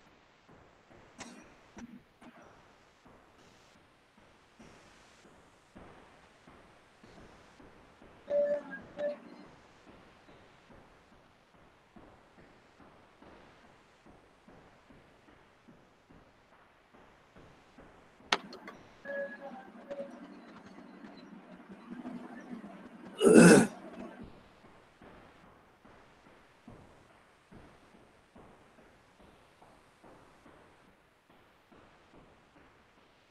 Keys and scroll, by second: 25.0 ctrl+v, 26.8-30.0 typing.